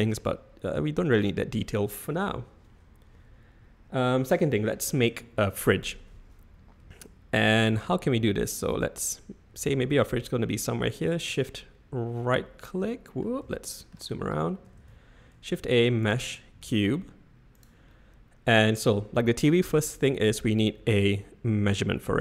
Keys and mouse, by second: 0.1-0.7 middle drag, 1.1 typing, 1.7 middle click, 11.6-13.2 middle drag, 13.5-13.9 shift+middle drag, 14.7 shift+a, 17.5 g.